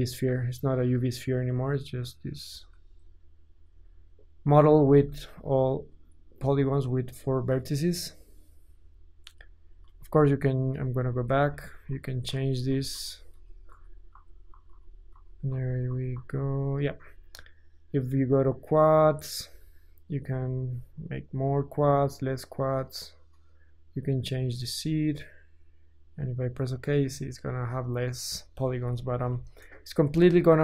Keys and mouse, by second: 2.5 Tab, 4.8 Tab, 9.3 Tab, 9.9 ctrl+z, 10.3 ctrl+z, 10.9 ctrl+z, 11.1 ctrl+z, 11.5 ctrl+z, 11.8 ctrl+z, 12.3 ctrl+z, 12.7 ctrl+z, 12.9 ctrl+z, 13.3 ctrl+z, 13.7 ctrl+z, 14.1 ctrl+z, 14.5 ctrl+z, 14.7 ctrl+z, 15.1 ctrl+z, 15.5 ctrl+z, 15.7-18.3 ctrl+middle drag, 15.7 ctrl+z, 15.9 ctrl+z, 16.1 ctrl+z, 16.3 ctrl+z, 18.3-30.6 drag, 29.1 KP_1.